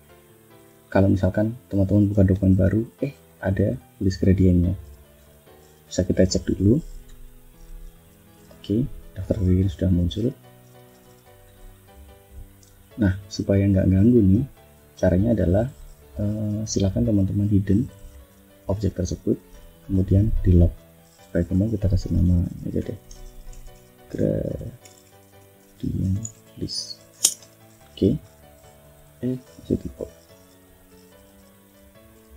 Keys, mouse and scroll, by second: 1.0 ctrl+scroll down 1, 1.8 shift+scroll down 1, 2.2 shift+click, 3.1 click, 4.9 ctrl+shift+f, 7.7 ctrl+click, 10.3 click, 11.1 click, 11.4 click, 12.6 click, 14.3 click, 15.2 click, 17.5 click, 19.8 click, 20.7 click, 21.7-27.2 typing, 30.5 click, 31.1 click, 32.2-32.3 typing.